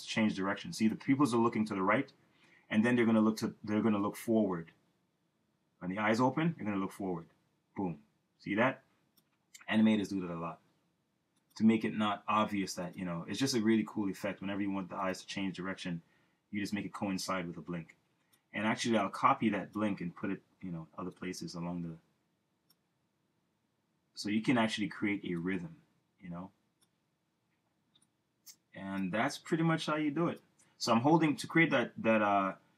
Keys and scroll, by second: 10.2 Return, 32.5 super+z.